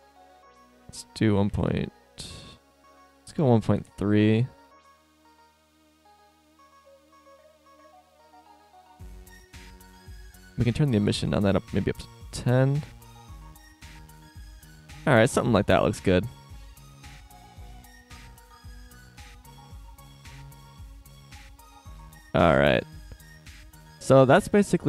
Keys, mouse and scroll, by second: 0.5-1.6 drag, 2.6-4.6 drag, 6.2-7.7 drag, 8.4-9.9 drag, 10.5-12.9 drag, 13.9 click, 16.8 click.